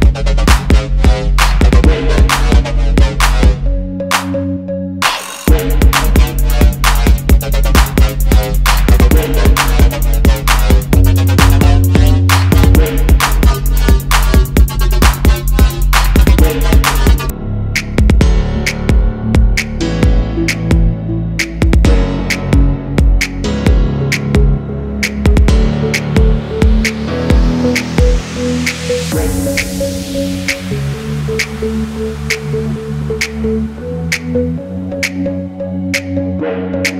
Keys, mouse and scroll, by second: 0.4 alt+scroll up 1, 0.7 space, 1.2 alt+scroll down 1, 1.5 space, 3.9-4.3 alt+scroll up 1, 4.6 alt+scroll down 1, 9.2 space, 9.2 double click, 10.8 ctrl+g, 11.1 double click, 12.4 ctrl+z, 12.7 space, 12.7 double click, 14.2 alt+shift+click, 15.5 double click, 16.2 space, 16.3 double click, 18.6 ctrl+x, 20.0 double click, 20.7 alt+scroll down 1, 21.8 ctrl+v, 22.2 alt+shift+click, 23.0 alt+shift+click, 23.9 alt+scroll up 1, 24.5 double click, 29.8 double click, 30.1 alt+scroll down 1, 31.1 Delete, 31.5 space, 32.7 alt+scroll up 1, 33.0 space.